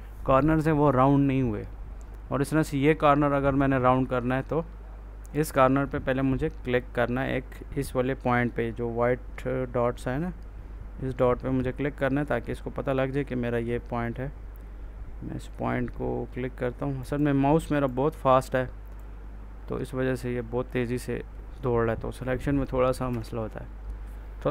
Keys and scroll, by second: 22.9 F4.